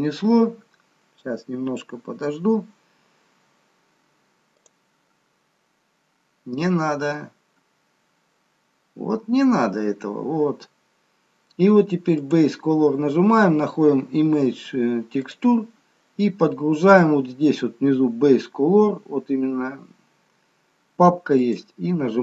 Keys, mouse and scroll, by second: 12.3 click, 12.3 scroll down 2.